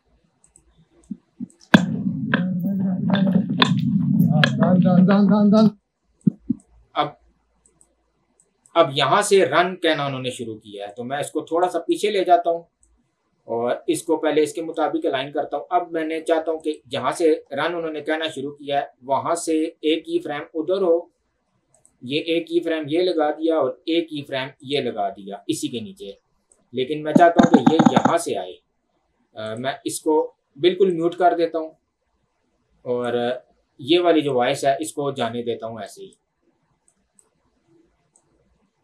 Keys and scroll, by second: 1.6 space, 5.6 space.